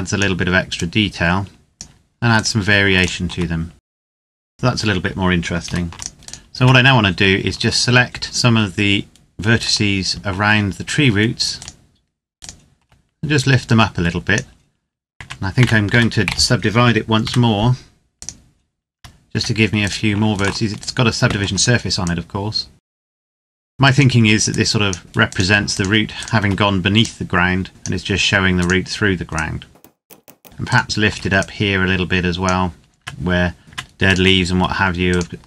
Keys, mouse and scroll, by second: 2.1 right click, 2.7 shift+right click, 3.6 click, 4.0 s, 4.1 click, 4.4 Tab, 5.4 ctrl+s, 5.7 click, 6.1 right click, 6.3 Tab, 8.0 shift+right click, 13.0 click, 14.9 Tab, 15.6 a, 16.0 a, 17.0 w, 17.9 click, 18.7 Tab, 19.5 right click, 20.1 shift+right click, 21.8 click, 22.8-23.1 scroll up 1, 23.2 right click, 23.2 click, 23.4 right click, 23.5 click, 23.7 right click, 24.2 click, 25.0 right click, 25.5 shift+right click, 26.8 click, 28.3 right click, 29.0 click, 30.0 right click, 30.1 shift+right click, 31.4-32.4 drag, 32.7 Tab, 33.8 right click, 34.9 shift+right click.